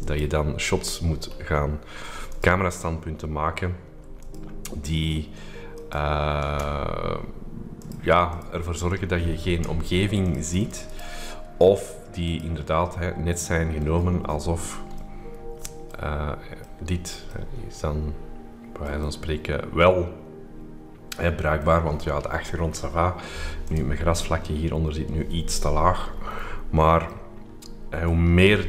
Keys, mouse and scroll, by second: 1.0-1.9 scroll down 2, 2.2 click, 4.2 click, 5.7 click, 6.3 click, 7.8-8.8 drag, 10.2-11.4 drag, 10.9 right click, 11.1 right click, 11.4 right click, 12.2 click, 13.3-13.9 scroll up 2, 13.9-15.0 scroll down 3, 15.0-16.1 scroll up 2, 16.1-16.6 scroll down 2, 16.6-22.1 middle drag, 16.6-18.3 scroll up 3, 18.3-18.8 shift+scroll up 1, 18.8-21.6 shift+scroll up 1, 21.6-22.1 scroll up 1, 23.6 click, 26.1-26.9 scroll down 2, 27.1-28.6 middle drag, 27.1-28.6 scroll up 2.